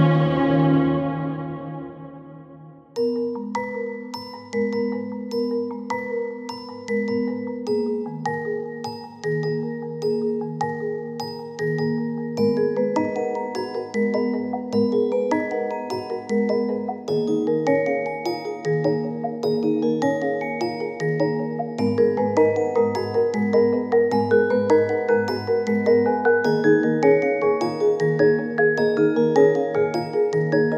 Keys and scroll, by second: 3.9 i, 4.4 k, 11.5 i, 11.7 k, 14.5 i, 14.8 k, 18.6-19.5 typing, 21.5 i, 22.1 k, 25.6 i, 26.9 k, 29.5-30.3 typing.